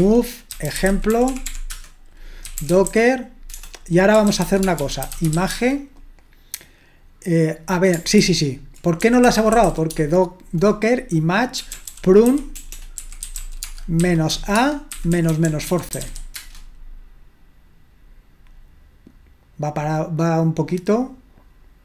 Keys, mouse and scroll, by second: 0.0-6.0 typing, 8.2 ctrl+w, 8.8-10.4 typing, 11.5-16.5 typing.